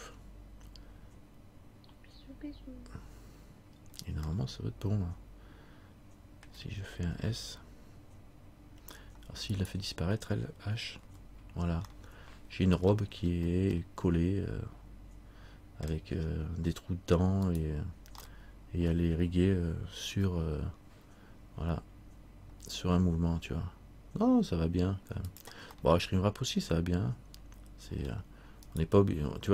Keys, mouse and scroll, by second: 3.9-4.4 scroll down 1, 4.5 middle click, 5.8 middle click, 9.7 right click, 11.2 h, 12.1 middle click, 13.2-13.9 scroll up 3, 13.9 middle click, 16.4-16.8 scroll down 1, 17.6 right click, 18.4 middle click, 20.3 r, 25.9 middle click, 28.1-28.7 scroll down 1, 28.8 right click.